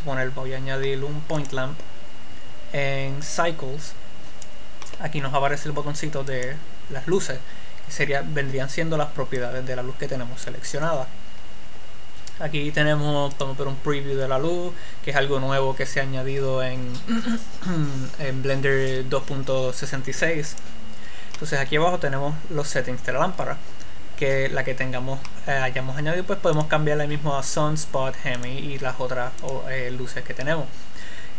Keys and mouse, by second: 3.5-5.3 drag, 6.7-8.4 drag, 9.8-10.9 drag, 13.7-15.6 drag, 20.8-22.5 drag, 26.9-31.3 drag.